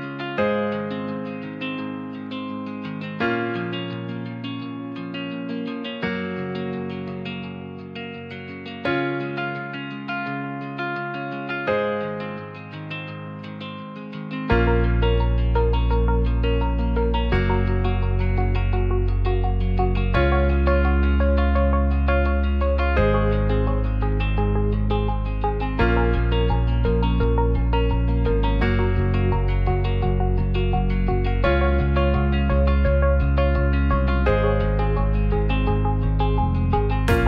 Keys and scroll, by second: 3.5 ], 3.7 ], 3.9 ], 29.7 alt+z.